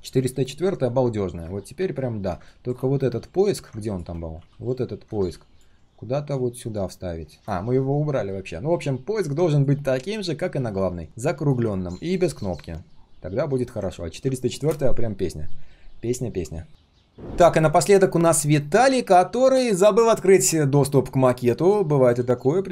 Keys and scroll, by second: 3.6 ctrl+space, 4.4 ctrl+z.